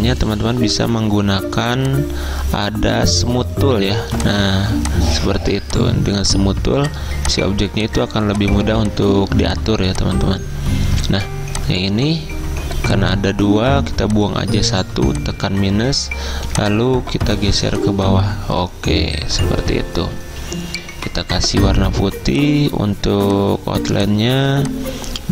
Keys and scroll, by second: 14.9 -, 21.4 d, 23.9 z.